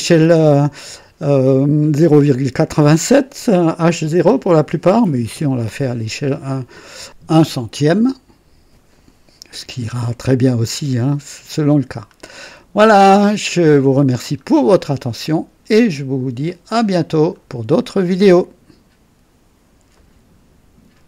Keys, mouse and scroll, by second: 10.9 scroll down 1, 11.4-13.2 drag, 13.4 scroll up 1, 14.1-14.7 scroll down 1, 14.7-15.4 right drag, 16.4-17.5 drag, 19.9 right click, 21.0 click.